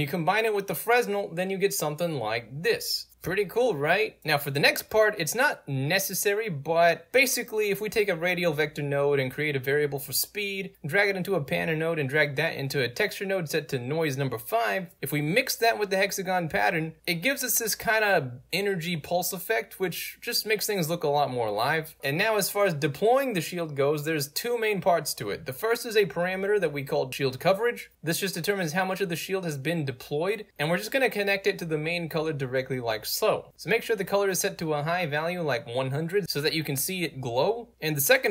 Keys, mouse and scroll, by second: 0.2 scroll down 4, 0.3 right drag, 0.5-0.9 right drag, 1.1-1.9 drag, 2.5-5.1 alt+drag, 5.5-5.9 right drag, 6.1 middle click, 6.1 scroll up 2, 6.5-7.0 right drag, 8.0 click, 9.8 click, 11.3 click, 12.4 click, 14.5 right drag, 14.9 right click, 15.4-16.5 drag, 20.0 alt+z, 24.2-24.7 right drag, 25.4 click, 27.0 click, 28.1-30.3 drag, 30.7-31.2 right drag, 33.9 click, 35.4 click, 36.0 click, 36.8 right click, 37.7 click, 38.1-38.3 right drag.